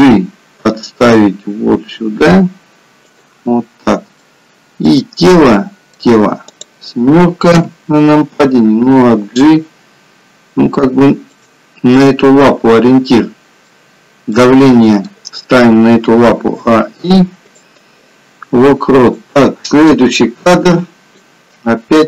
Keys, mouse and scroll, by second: 0.0 g, 4.1 middle click, 6.5 click, 7.6 KP_7, 9.0 g, 11.9 middle click, 16.1 a, 16.4 i, 19.2 click.